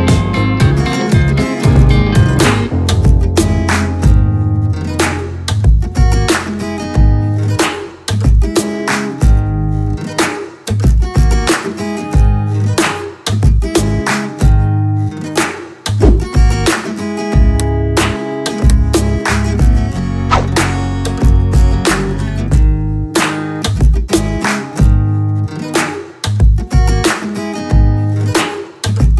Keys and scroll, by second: 7.9 alt+shift+Return, 8.9 Up, 8.9 Up, 10.3 ', 11.1 Right, 11.2 Right, 11.3 Right, 11.6 ', 13.4 Right, 13.5 Left, 13.5 Left, 13.6 space, 13.7 Right, 14.2 Right, 15.0 Left, 15.0 space, 23.2 Return, 24.5-26.3 typing.